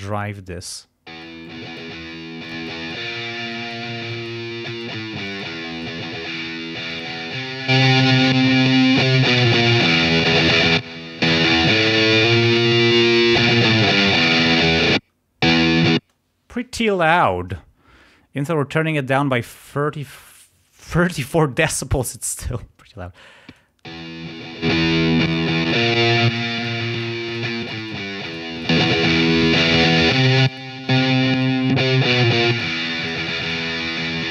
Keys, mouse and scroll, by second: 0.0 click, 1.1 space, 1.4 click, 2.5 click, 3.5 click, 4.1 click, 4.6 click, 5.2 click, 5.7 right click, 6.9 click, 7.7 scroll up 1, 8.3 scroll up 1, 8.6-10.0 scroll down 4, 10.2-11.0 scroll up 2, 11.3 scroll down 1, 15.0 space, 23.5 click, 23.9 space, 24.6 click, 25.3 click, 25.6 click, 25.9 click, 26.2 click, 26.9 click, 27.3 click, 27.6 click, 28.2 click, 29.4 click, 29.7 click, 30.1 click, 30.4 click, 30.9 click, 31.3 click, 31.7 click, 32.1 click, 32.5 click, 33.1 click, 33.4 click.